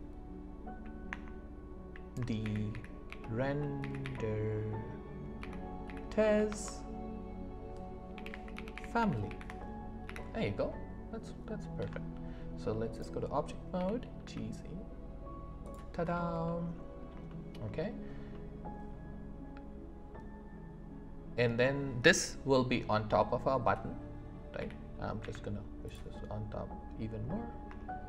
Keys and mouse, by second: 1.1 Return, 2.4 shift+r, 10.0 ., 11.8 Tab, 13.7 g, 14.2 z, 15.6 click, 16.4 middle click, 17.3 shift+middle drag, 18.3 middle click, 24.6 g, 25.2 z.